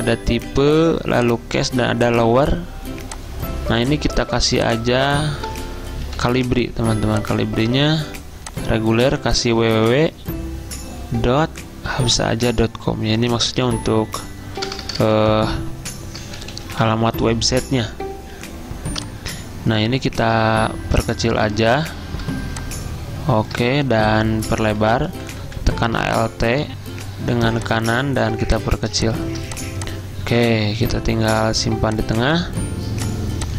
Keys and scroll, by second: 0.2 ctrl+a, 3.9 ctrl+a, 5.2-6.9 typing, 9.3-10.0 typing, 11.4 ., 13.2-17.1 typing, 24.9 alt+Right.